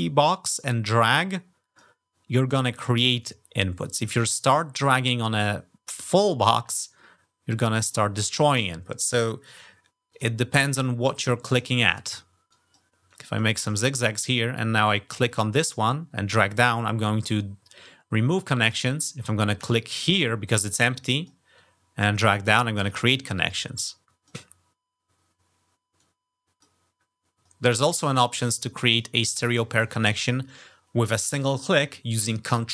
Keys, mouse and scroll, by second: 2.6-4.0 drag, 5.7-7.7 drag, 9.9 click, 10.8 click, 11.3 click, 11.6 click, 12.3 click, 12.9 click, 14.9-18.5 drag, 19.4 click, 20.3 click, 21.4-22.6 drag, 23.3-24.1 drag, 25.8-26.4 drag, 27.8 ctrl+click, 28.2 click.